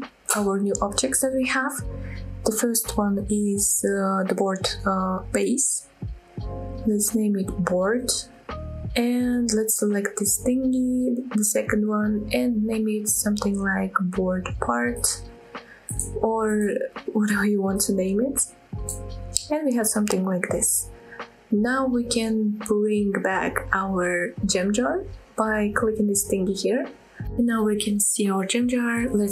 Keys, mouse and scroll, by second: 0.8 click, 1.0-9.1 drag, 10.3 click, 10.5-15.2 drag, 16.2 click, 16.4-20.0 drag, 20.7 click, 21.2 click, 21.7 shift+click, 23.0 click, 23.6 middle click, 24.4-24.8 scroll down 1, 24.8 middle click, 25.4 scroll up 2, 27.2 click, 28.1 click, 28.9 click.